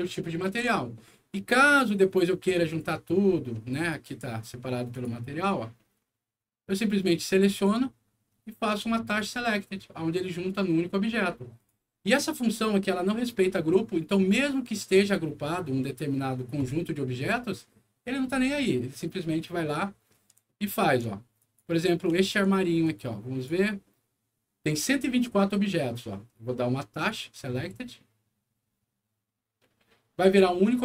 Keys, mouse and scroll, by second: 0.4 ctrl+z, 1.0 ctrl+scroll down 2, 2.3 ctrl+middle click, 3.1 ctrl+scroll up 2, 3.6 middle click, 4.0 click, 4.8 click, 5.7 middle click, 6.7 click, 9.0 click, 11.5 click, 12.1 click, 13.1 middle click, 14.0 middle click, 19.6 middle click, 20.4 alt+middle click, 21.3 alt+click, 22.1 alt+middle click, 22.8 alt+click, 26.8 click.